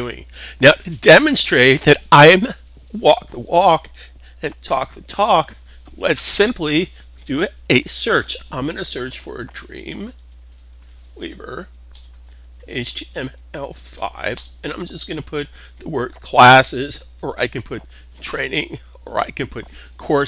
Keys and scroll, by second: 9.0-13.9 typing, 15.4-18.2 typing, 19.8-20.2 typing.